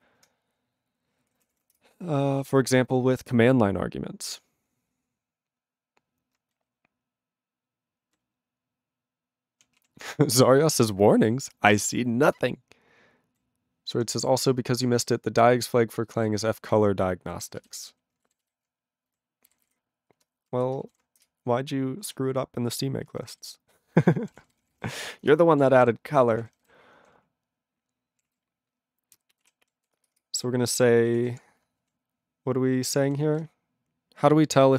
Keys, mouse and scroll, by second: 6.6-8.0 ctrl+n, 8.2-9.6 ctrl+p, 9.8 ctrl+a, 10.0-11.3 ctrl+n, 11.4-12.2 ctrl+p, 12.6-13.4 ctrl+n, 13.4 ctrl+p, 13.9 ctrl+p, 14.0 ctrl+p, 14.4 ctrl+n, 14.9 ctrl+n, 14.9 ctrl+n, 15.5-16.4 ctrl+n, 16.9 ctrl+n, 17.8 Return, 19.5 ctrl+g, 23.3 ctrl+g, 23.7 ctrl+s, 24.0-25.4 typing, 25.6 ctrl+a, 25.7 ctrl+e, 25.8 ctrl+g, 26.4 ctrl+s, 26.5 ctrl+n, 26.6 ctrl+n, 26.9 ctrl+p, 27.2-28.2 ctrl+p, 28.3 ctrl+a, 28.3-29.4 ctrl+n, 29.4 ctrl+e, 29.6 ctrl+p, 30.1 Return, 30.1 Return, 30.9-31.9 typing, 33.0 ctrl+e, 33.2 ctrl+b.